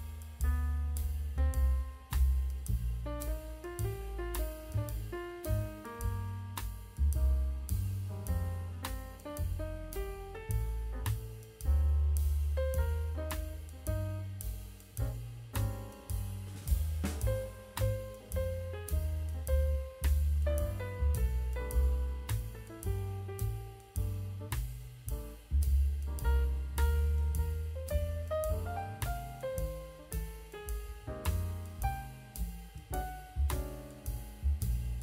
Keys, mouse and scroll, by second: 0.0 middle drag, 0.5 middle click, 1.0 middle click, 1.6 click, 2.3 click, 2.5 middle drag, 2.7 scroll down 2, 3.5 click, 3.8 KP_1, 4.5 s, 6.2-6.9 drag, 7.8 scroll up 2, 8.3 click, 9.2 click, 9.4-10.7 drag, 10.9 scroll down 1, 11.2 click, 11.5 click, 13.0 shift+d, 13.9 r, 17.9 click, 19.1-20.1 drag, 20.4 scroll up 2, 20.8 KP_Decimal, 22.2 click, 23.4 click, 24.3 s, 25.9 click, 26.7 s, 27.4 click, 27.9 click, 28.1 s, 28.8 click, 29.0-29.4 scroll down 2, 29.2-29.9 middle drag, 30.0 scroll down 2, 30.3 shift+middle click, 31.0 click, 31.6-33.0 drag, 33.3-33.7 scroll down 2, 33.9 click, 34.7 click, 34.9 drag.